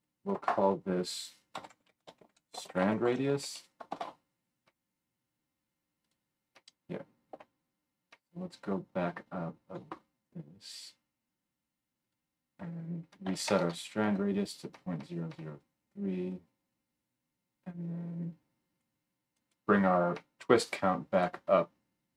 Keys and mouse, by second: 7.3 Tab, 12.0-22.1 middle drag, 13.6 KP_0.